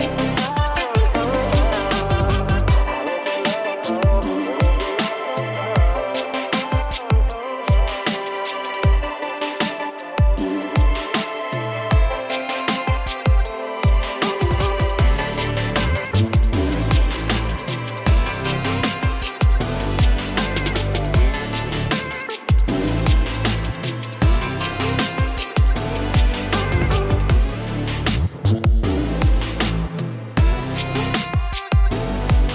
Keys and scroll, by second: 6.3 ], 6.6 ], 10.9 ctrl+alt+z, 11.1 ctrl+alt+z, 11.3 ctrl+alt+z, 11.5 ctrl+alt+z, 29.0 alt+space, 30.2-30.7 typing.